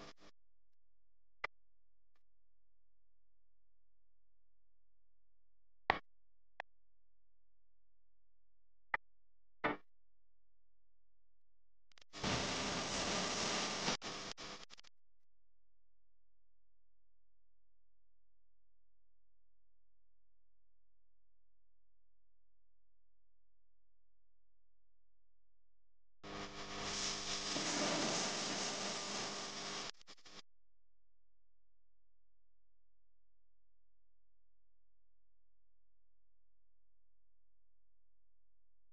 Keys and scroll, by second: 5.9-6.4 typing, 6.9 alt+super+space, 6.9 alt+super+space, 7.0 alt+super+space, 7.1 alt+super+space, 7.4 alt+super+space, 7.6 alt+super+space, 8.4 super+space, 8.5-9.5 typing, 15.6 super+z, 16.1 super+space, 16.6 super+space, 18.8 super+z, 19.2 super+space, 19.7 super+space, 21.8 space, 22.3 alt+super+space, 22.3 alt+super+space, 22.4 alt+super+space, 22.5 alt+super+space, 22.8 alt+super+space, 23.0 alt+super+space, 23.7-26.0 super+space, 31.0 super+z, 35.4 space, 35.9 super+space, 36.0 super+space.